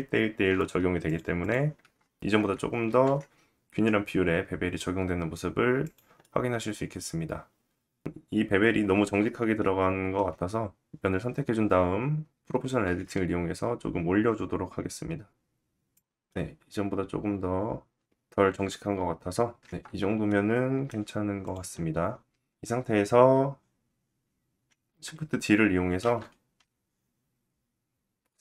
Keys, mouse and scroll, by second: 0.6 click, 0.7 middle drag, 0.9 click, 1.0-1.4 middle drag, 1.4 Tab, 2.2-5.5 ctrl+drag, 2.4 ctrl+b, 5.5-9.1 middle drag, 8.5 Tab, 9.1 Tab, 9.7-10.1 scroll up 1, 10.1 click, 10.8 3, 10.9 click, 11.8 middle click, 14.0-16.7 middle drag, 14.2 Tab, 14.3 scroll down 2, 15.0 scroll down 1, 18.0 scroll up 1, 18.1 Tab, 18.5-21.7 middle drag, 18.5 g, 20.3 KP_1, 20.8 Tab, 20.9-21.2 scroll down 2, 21.7 click, 21.7-28.4 middle drag, 23.1-24.6 scroll down 2, 25.1 shift+d, 27.6 KP_1.